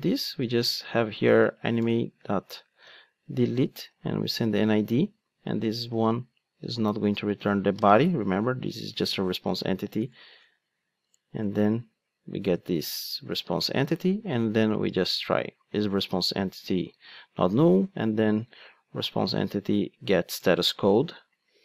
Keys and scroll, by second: 3.2 Return, 5.3 alt+shift+Right, 11.1 alt+Return, 13.7 Return, 15.8 super+c, 16.9 super+v, 20.4 Return.